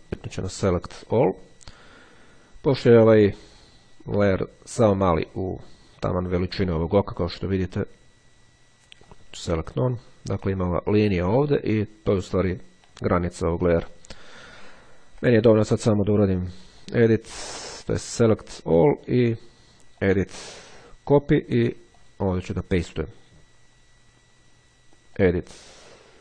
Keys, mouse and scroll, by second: 0.5 click, 1.3 click, 6.5-7.0 ctrl+scroll up 2, 7.3-7.9 ctrl+scroll up 2, 9.2 click, 12.7-14.5 drag, 14.7-15.1 ctrl+scroll down 2, 16.8 click, 18.8 click, 20.1 click, 21.3 click, 22.1 click, 25.2 click.